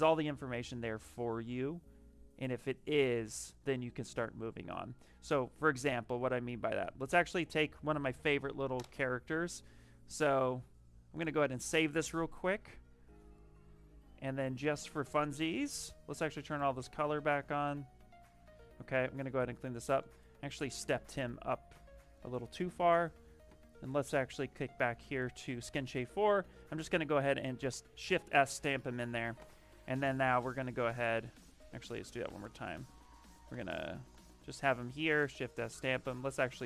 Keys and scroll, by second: 18.9 ctrl+n, 20.7 shift+d, 27.3 shift+s, 31.2 ctrl+n, 35.1 shift+s.